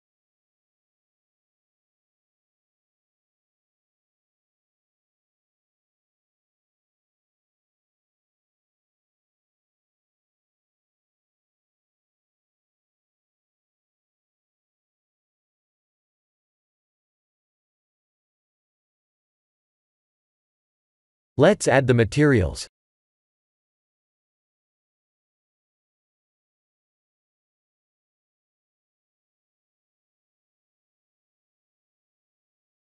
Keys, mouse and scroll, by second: 1.6 click, 3.3 click, 3.6-4.4 scroll down 4, 4.4 middle click, 5.1-5.9 scroll down 3, 5.9 click, 6.4 middle click, 7.7-8.2 scroll down 2, 8.7 shift+middle click, 10.3-10.8 scroll up 3, 10.9 middle click, 11.6 shift+middle click, 12.2 middle click, 13.5 click, 14.7 middle click, 15.3-16.5 scroll down 4, 17.2 click, 18.9 click, 21.3 click, 22.1 click, 25.1 click, 26.8 click, 27.3 Tab, 30.6-31.9 scroll up 4, 31.9 2.